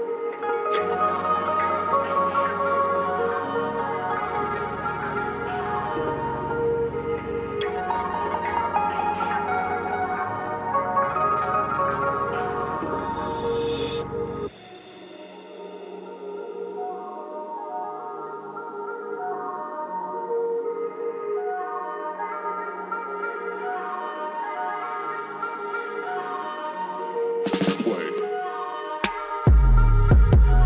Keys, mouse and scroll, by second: 7.5 typing, 9.0 typing, 10.8-22.2 drag, 11.0 typing, 12.8 typing, 22.2-28.4 drag, 28.4-30.6 ctrl+drag.